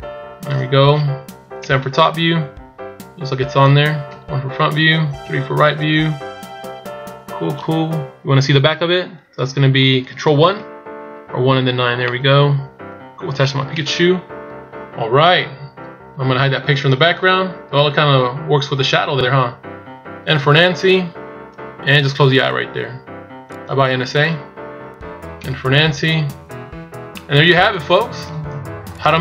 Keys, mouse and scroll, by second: 1.4 KP_7, 2.1-2.8 scroll up 1, 2.8 scroll down 1, 2.9 scroll down 2, 3.9 KP_1, 5.0 KP_3, 6.9 scroll up 1, 10.0 ctrl+KP_1, 11.8 middle click, 13.6 KP_1, 14.1 scroll down 4, 14.8 scroll down 2, 15.1-15.6 shift+scroll up 3, 16.9 shift+scroll down 2, 20.1 n, 23.2 click, 25.2 n, 25.8-26.3 scroll up 3, 26.2 a, 26.8 middle click, 29.1 middle click.